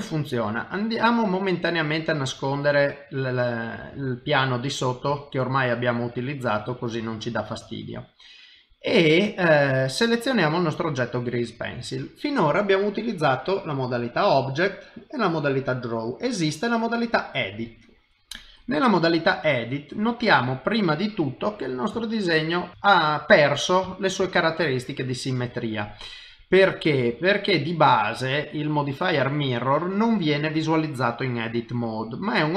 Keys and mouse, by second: 0.0 ctrl+middle click, 0.2 ctrl+middle click, 2.0 click, 2.7 middle click, 4.0 shift+middle click, 4.4 middle click, 5.1 shift+middle click, 5.6 middle click, 7.0 shift+middle click, 7.5 middle click, 10.3 click, 13.1 click, 19.3 middle click, 22.0 shift+middle click, 22.7 middle click, 22.8 shift+middle click, 23.3 middle click, 24.3 shift+middle click, 24.7 middle click, 25.0 middle click, 25.9 middle click, 31.0 middle click.